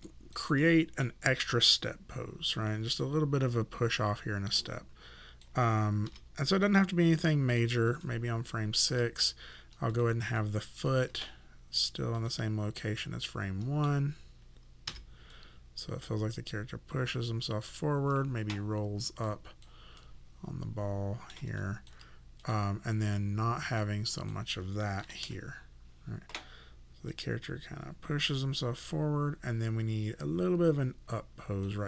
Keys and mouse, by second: 0.1 alt+right click, 0.6 alt+middle click, 3.0 click, 6.1 s, 7.5 click, 8.0 alt+click, 10.4 alt+click, 13.0 middle click, 14.9 s, 15.3 click, 19.3 click, 20.0 middle click, 21.6 alt+click, 25.0 KP_0, 25.2 Return, 27.1 click.